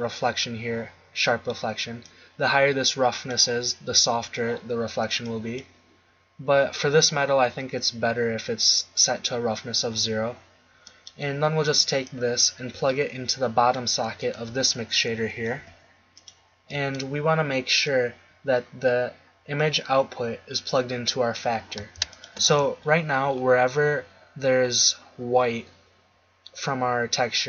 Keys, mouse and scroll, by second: 2.0-3.8 drag, 11.0-12.1 middle drag, 12.1-13.4 drag, 14.6 f, 15.8 g, 16.8-17.9 drag.